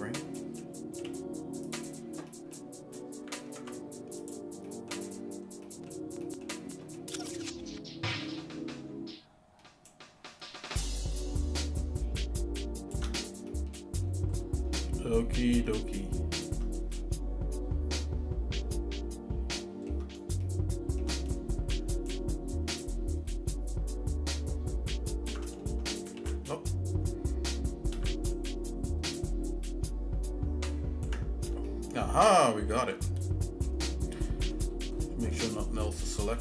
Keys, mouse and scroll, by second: 0.4 middle click, 1.0 z, 2.3 middle click, 3.5 ctrl+Tab, 4.6 middle click, 4.9-5.3 scroll down 2, 5.2 scroll up 1, 5.7 middle click, 6.2 middle click, 7.0 middle click, 7.2 scroll down 2, 9.9-13.3 ctrl+shift+right drag, 13.5 middle click, 14.0-14.6 scroll up 4, 14.8 shift+middle click, 15.7 shift+middle click, 17.0-20.0 shift+middle drag, 20.4 shift+middle click, 22.1-25.3 ctrl+shift+right drag, 26.4 ctrl+z, 28.3-31.4 ctrl+right drag, 31.7-33.7 shift+middle drag, 34.3 middle click, 34.7 scroll down 1, 34.7 scroll up 1, 34.9 scroll down 2, 35.3 middle click, 35.9 shift+middle click.